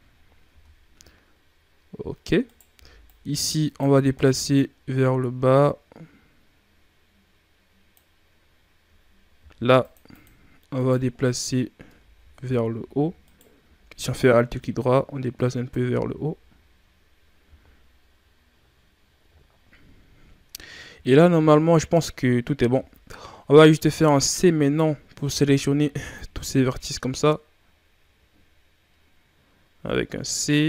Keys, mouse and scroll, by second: 0.4 Tab, 2.4 right click, 2.6 b, 4.5-7.7 drag, 9.3 ctrl+r, 10.7 right click, 13.1 alt+right click, 14.3-16.0 drag, 16.0 z, 17.4 z, 19.4-20.3 ctrl+scroll down 1, 20.8 z, 22.6 z, 23.5 right click, 23.8-24.3 shift+scroll down 2, 24.3 scroll up 1, 25.4 c.